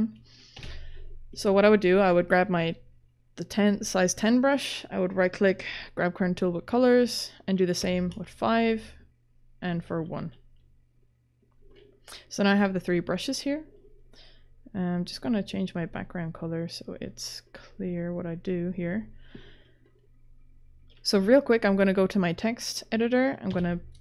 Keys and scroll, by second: 0.3-1.1 typing, 7.8 5, 10.2 1, 23.2-24.0 typing.